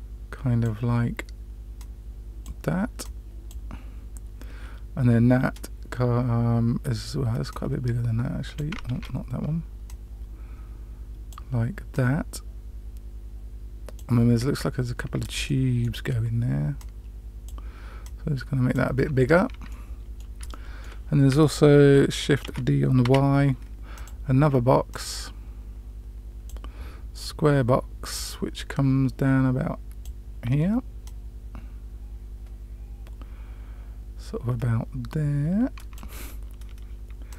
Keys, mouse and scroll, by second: 1.7 click, 2.9 click, 7.4-8.5 drag, 8.8 ctrl+z, 9.8-11.3 drag, 11.8-13.9 drag, 15.4-15.8 middle drag, 16.7-17.4 drag, 17.9 click, 19.6-20.2 middle drag, 20.4-20.8 shift+middle drag, 22.4 shift+d, 24.8-26.4 drag, 28.1-30.0 drag, 31.0-36.0 drag, 37.2 click.